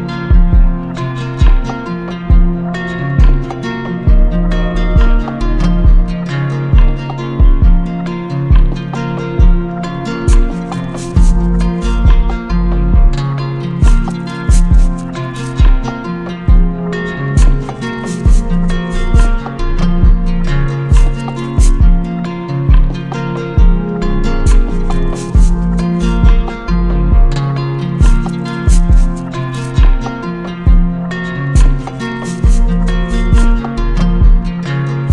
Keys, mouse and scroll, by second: 1.8 click, 3.2 click, 3.7 click, 4.1 click, 6.2 click, 7.0 click, 8.1 click, 8.7 click, 9.1 click, 14.0 shift+click, 15.0 shift+click, 15.8 click, 16.8 click, 17.3 click, 17.8 click, 19.2 click, 21.5 click, 24.0 shift+click, 24.4 ctrl+z, 26.6 shift+click, 28.3 shift+click, 30.1 click, 30.8 click, 31.6 click, 32.4 click, 33.0 right click, 34.3 click.